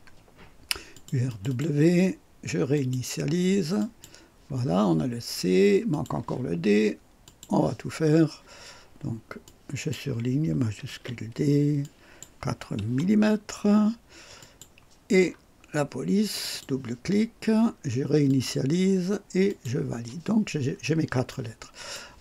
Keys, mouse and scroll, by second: 0.9 click, 1.3 click, 2.7 click, 3.8 click, 5.0 scroll up 2, 5.9 click, 7.2 click, 9.4 click, 10.9 shift+d, 11.8 click, 12.8 KP_4, 14.4 click, 15.2-15.5 scroll down 1, 16.3 click, 18.3 click, 19.5 click, 20.6 scroll up 1, 21.3-22.1 right drag.